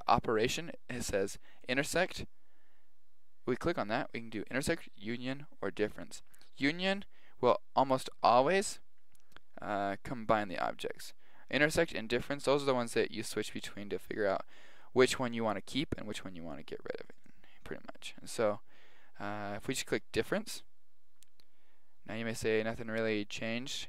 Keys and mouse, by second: 1.6 click, 17.2 click, 19.0 click, 21.2-22.0 middle drag, 23.4-23.8 middle drag.